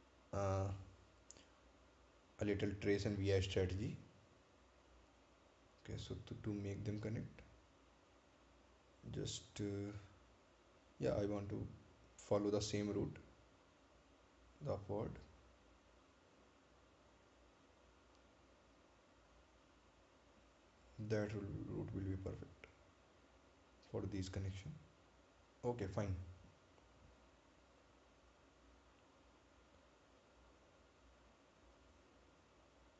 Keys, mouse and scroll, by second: 5.8 click, 18.9 click, 23.6 click, 27.4 scroll down 1, 28.1 scroll up 1, 28.9 scroll down 1, 30.2 right click, 31.5 click.